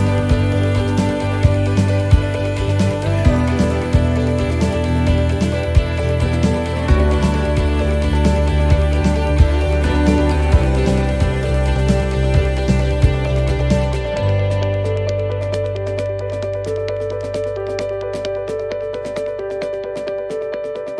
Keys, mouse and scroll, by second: 8.0 click, 8.0 shift+d, 12.7 click, 12.7 shift+d, 14.4 middle click, 16.2 click, 19.1 click.